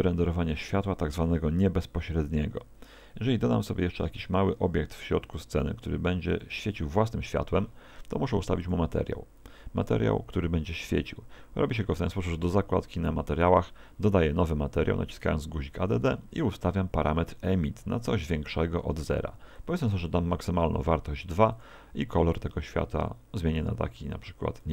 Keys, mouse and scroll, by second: 0.4 shift+a, 4.4 s, 5.3 click, 5.5 g, 6.4 click, 8.6 click, 9.9 click, 17.0 click, 19.6 click, 21.5 click.